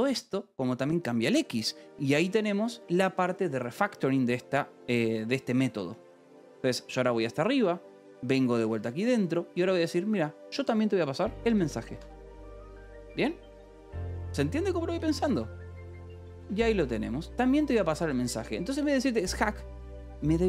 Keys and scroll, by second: 1.9 0, 2.7 Escape, 5.9-9.6 typing, 11.1-12.4 typing, 15.4-20.4 typing.